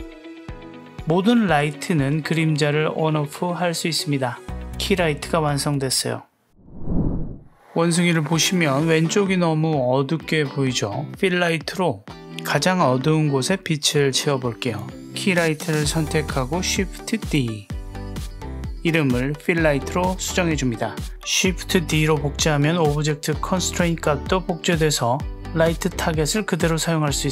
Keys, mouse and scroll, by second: 1.2 click, 2.0 click, 2.6 click, 3.3 click, 8.1 click, 14.9 click, 16.4 shift+d, 18.8 right click, 19.6 click, 19.7 click, 21.6 click, 23.4 click, 23.5 g.